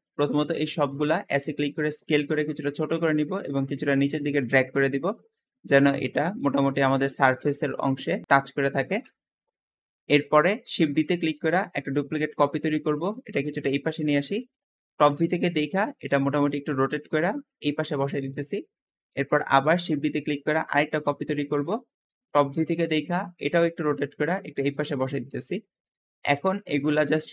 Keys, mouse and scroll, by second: 0.2 shift+middle click, 0.8-1.8 typing, 2.3 click, 3.4 click, 5.7 Tab, 6.6 `, 6.9-7.7 drag, 8.5 drag, 9.0 Escape, 9.3 Tab, 9.8-11.2 middle drag, 11.2 shift+d, 12.5 click, 12.9 click, 14.2 KP_7, 14.9-15.6 scroll up 2, 15.4 r, 15.6 7, 16.8 shift+middle click, 17.3 g, 18.2 click, 18.8-20.0 shift+middle drag, 20.0 shift+d, 21.1 KP_7, 22.0 g, 23.2 r, 24.4 g, 25.4 click, 25.8-27.2 middle drag, 27.2 s.